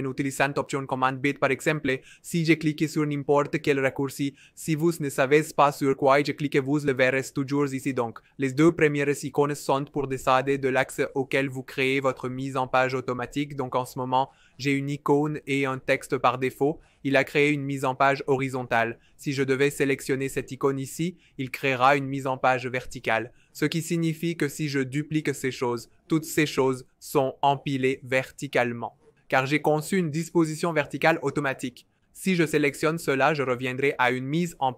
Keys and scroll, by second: 25.7 super+d, 25.9 super+d, 26.1 super+d.